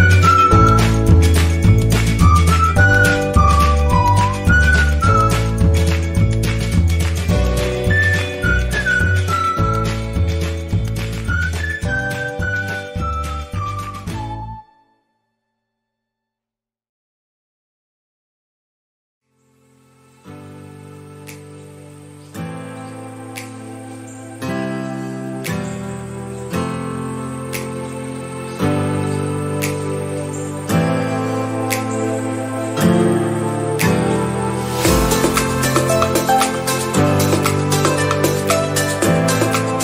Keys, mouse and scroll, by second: 1.9-7.6 drag, 11.4 click, 17.5 click, 21.1-39.8 drag.